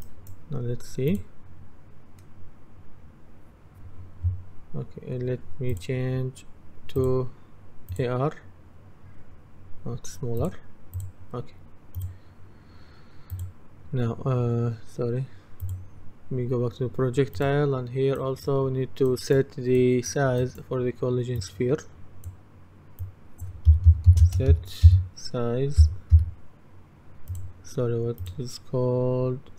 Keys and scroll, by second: 23.4-24.6 typing, 25.6-26.7 typing.